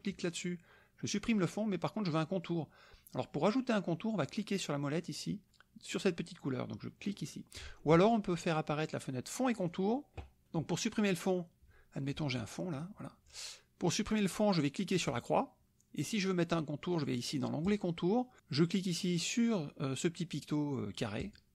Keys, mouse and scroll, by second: 0.1 click, 7.1 click, 9.5 click, 12.7 click, 15.0 click, 17.6 click, 21.2 click.